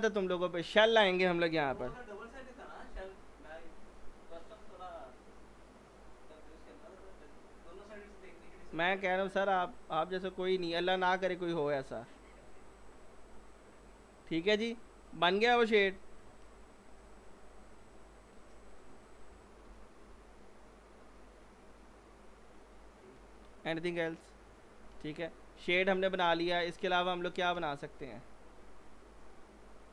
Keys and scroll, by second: 1.7-2.5 typing, 15.8 F4, 19.7 F4, 27.6 z.